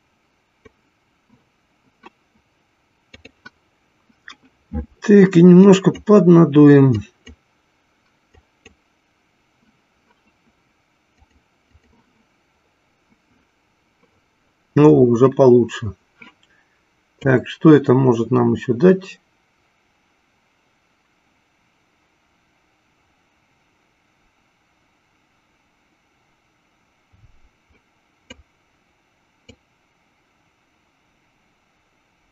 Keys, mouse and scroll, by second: 0.1 click, 3.0 click, 5.9 click, 7.5 click, 8.7 click, 11.1-13.0 drag, 17.1-28.9 drag, 29.6-32.3 drag.